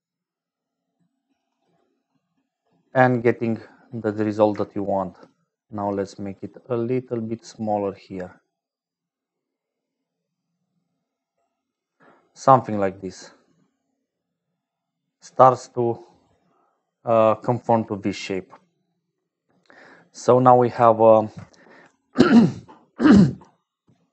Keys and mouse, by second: 2.6-3.9 drag, 5.3-12.1 shift+drag, 12.5-14.0 drag, 14.0-16.8 middle drag, 18.4 click, 19.9 click, 20.9 ctrl+alt+click.